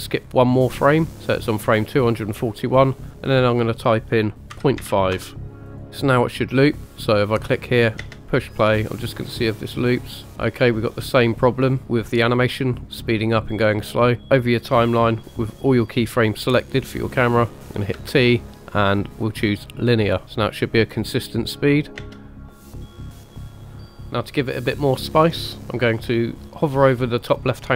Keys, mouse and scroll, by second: 0.1 click, 3.2-5.2 drag, 5.7 click, 7.1 click, 8.0 space, 19.7 t, 20.5 click, 21.2 click, 21.8 click, 22.0 space, 24.0 click, 24.0 scroll down 2.